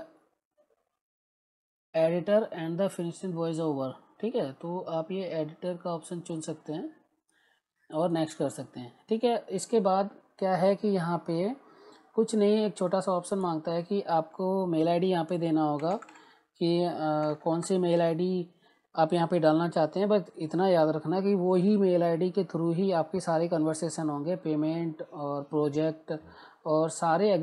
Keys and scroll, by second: 15.5-17.2 typing.